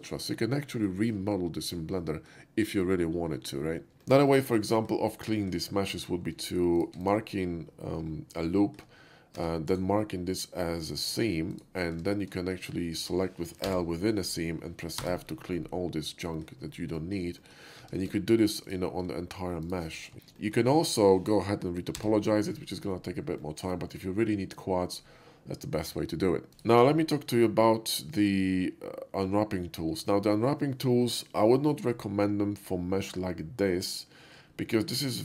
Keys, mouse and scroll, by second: 0.2 middle click, 0.3 middle click, 0.9 shift+middle click, 1.8 shift+middle click, 3.2 shift+middle click, 4.3 shift+middle click, 4.8 shift+middle click, 5.4 shift+middle click, 5.9 Tab, 6.8 click, 7.1 click, 8.6 shift+middle click, 9.7 Tab, 9.7 right click, 11.6 click, 12.5 shift+Tab, 12.5 middle click, 13.7 l, 15.0 f, 15.6 middle click, 16.7 middle click, 17.0 shift+middle click, 17.5 shift+middle click, 17.8 Tab, 18.7 alt+click, 19.7 click, 20.0 alt+shift+middle click, 20.4 shift+middle click, 20.7 shift+middle click, 22.0 /, 22.1-22.9 middle drag, 23.0 middle click, 23.5 shift+middle drag, 26.5 /, 26.6 click, 27.5 shift+middle click, 34.6 shift+middle click, 35.0-35.2 shift+middle drag.